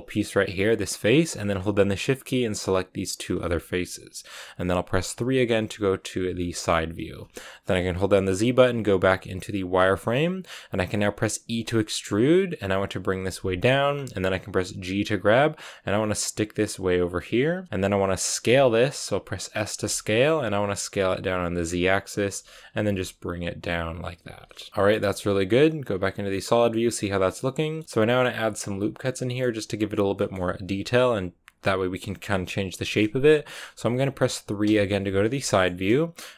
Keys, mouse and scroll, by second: 1.9-5.1 shift+right drag, 5.1 KP_3, 6.3-9.8 shift+middle drag, 9.8 z, 11.4 e, 14.5 g, 18.3 s, 22.2 g, 24.2 s, 24.7 middle click, 24.8 z, 25.2 middle click, 25.4 scroll down 3, 25.6-26.6 middle drag, 26.6 scroll down 1, 26.8-27.8 middle drag, 27.8-29.1 scroll up 1, 29.1-32.1 middle drag, 32.1 KP_6, 34.6 KP_3, 35.4 shift+middle click, 35.6-36.3 scroll up 2.